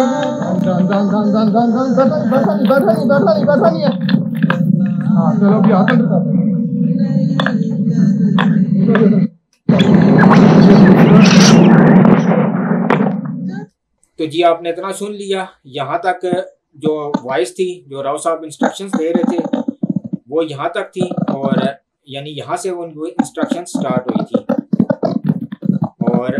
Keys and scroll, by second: 9.2 space, 13.6 space.